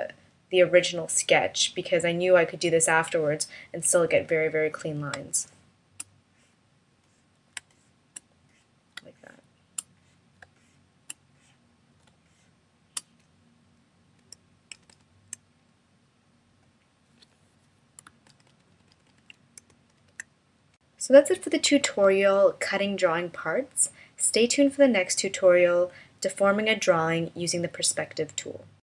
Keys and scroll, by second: 4.7 space, 7.0 space, 8.5 space, 9.9 space, 11.5 space, 14.9 shift+-, 19.4 shift+m.